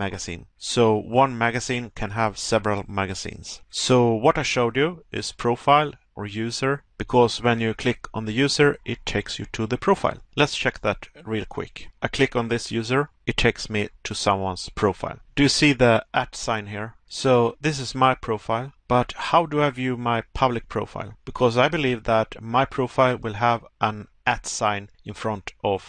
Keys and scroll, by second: 22.7 Pause.